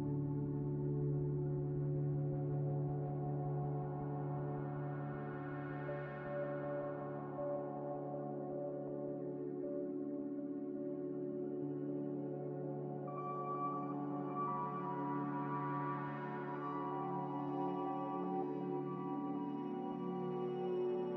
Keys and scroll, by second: 3.6 ctrl+z, 14.6 ctrl+z, 20.7-21.1 typing.